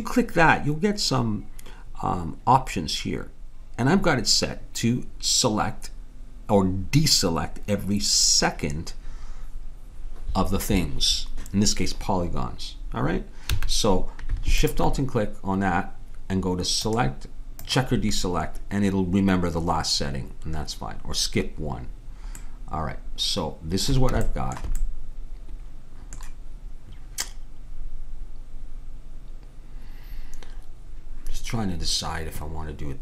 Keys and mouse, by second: 13.5 a, 14.6-16.4 drag, 17.8-19.0 drag, 22.5-27.5 middle drag.